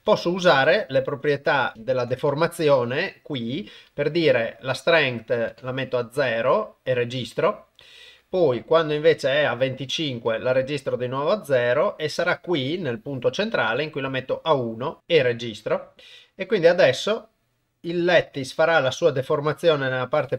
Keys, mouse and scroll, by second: 0.3 Left, 0.5 Right, 0.7 Right, 0.9 Right, 1.5 Left, 2.2 Tab, 5.4 click, 9.0 click, 11.6 click, 13.5 click, 16.4-20.3 drag.